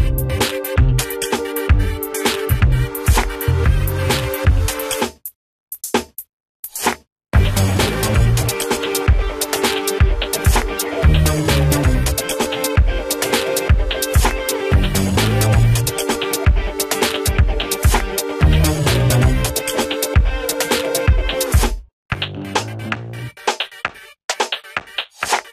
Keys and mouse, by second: 3.9 right click, 4.4 click, 4.8 F2, 5.2-9.4 drag, 15.5 Delete, 15.6 click, 18.4 F4, 19.0 click, 21.1 shift+s, 22.0 z, 22.6 ctrl+space, 23.1 z, 23.7 space, 24.6 click, 25.0 ctrl+z.